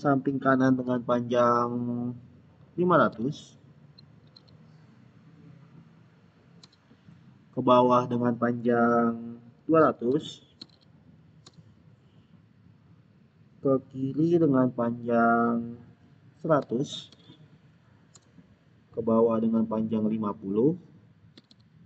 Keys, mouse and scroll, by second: 3.0-4.6 typing, 6.5 Return, 9.7-11.1 typing, 11.3 Return, 16.2-17.6 typing, 18.0 Return, 21.1-21.8 typing.